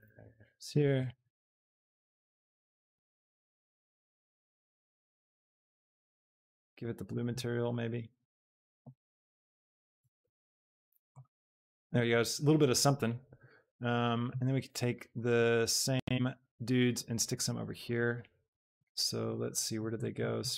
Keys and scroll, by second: 2.2 shift+d, 4.0 s, 5.5 g, 9.9 a.